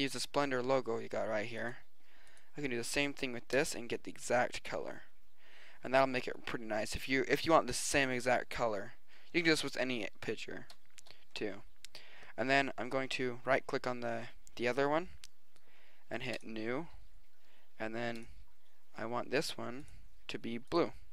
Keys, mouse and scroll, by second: 0.0 click, 3.7-5.4 middle drag, 5.9-8.4 drag, 9.4 click, 12.4-13.2 drag, 13.5-15.6 drag, 16.4-17.4 drag.